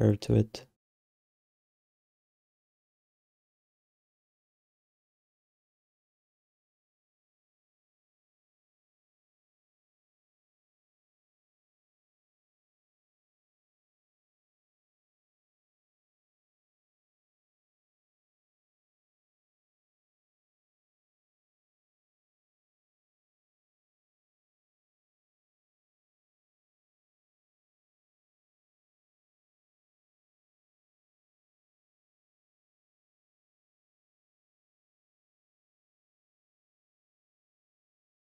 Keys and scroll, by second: 2.9 q, 3.7 alt+shift+d, 8.9 r, 10.5 q, 11.3 r, 13.8 e, 19.5-21.7 typing, 24.5 z, 26.7 r, 32.2 q, 36.5 3.